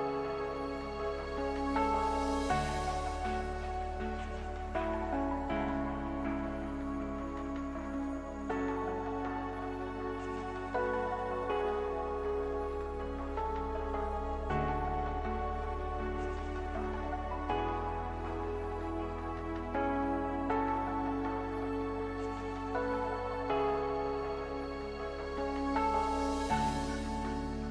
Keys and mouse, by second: 0.4-2.6 middle drag, 4.9 Tab, 8.0-10.6 drag, 9.5 KP_Divide, 10.6 Tab, 13.5 s, 15.8 a, 17.7 KP_1.